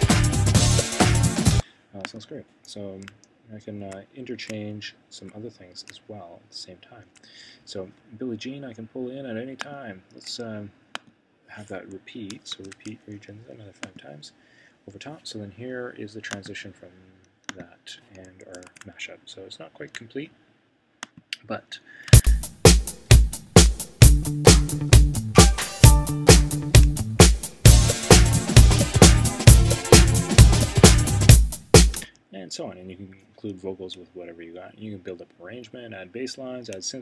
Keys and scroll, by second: 12.5 super+r, 18.6 super+s.